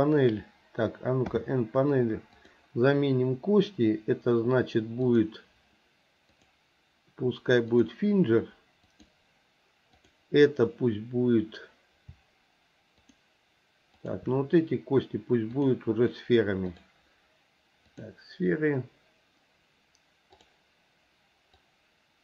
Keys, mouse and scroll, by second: 1.3 n, 2.4 click, 5.1 click, 6.3-7.9 drag, 8.9 click, 10.0 click, 13.0 shift+click, 13.9 shift+click, 15.6-16.9 drag, 17.9 click, 21.5-22.2 drag.